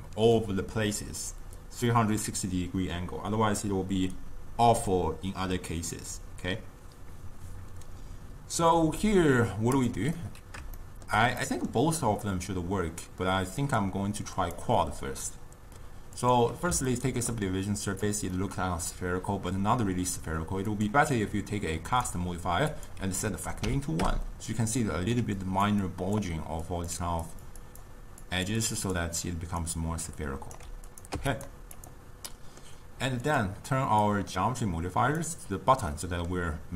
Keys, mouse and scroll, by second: 9.8 click, 10.2-13.7 middle drag, 13.7 click, 14.4-16.9 drag, 16.9-18.0 ctrl+middle drag, 18.0 click, 18.4-20.8 middle drag, 20.8-25.3 drag, 25.3-29.6 typing, 25.4 click, 26.0 click, 26.8 click, 27.4 click, 27.7 click, 28.3 click, 28.7 click, 29.7-30.7 right drag, 30.7 d, 30.9 click, 31.2 x, 31.8 click, 32.4 middle click, 33.3-35.3 drag, 36.0-36.7 middle drag.